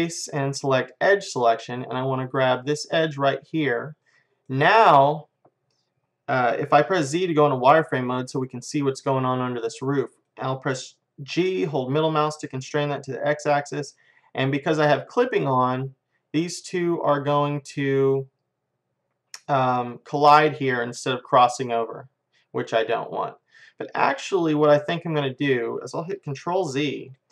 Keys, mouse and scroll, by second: 3.0-4.2 drag, 4.3 click, 4.5 middle click, 7.0 z, 7.5-9.2 middle drag, 9.6-11.0 middle drag, 11.4 g, 26.6 ctrl+z, 27.2-27.3 middle drag.